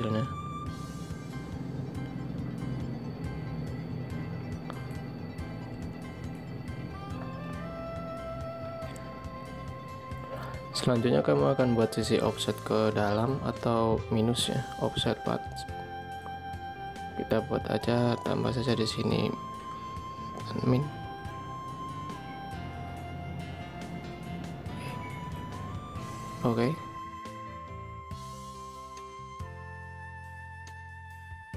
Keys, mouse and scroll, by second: 4.8 ctrl+y, 19.4 Left, 30.5 ctrl+click.